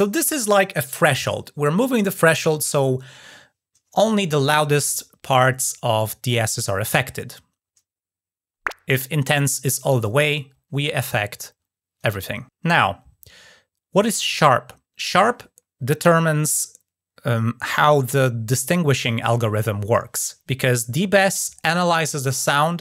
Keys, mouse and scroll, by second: 8.8 click, 9.7 click, 9.9-12.5 drag.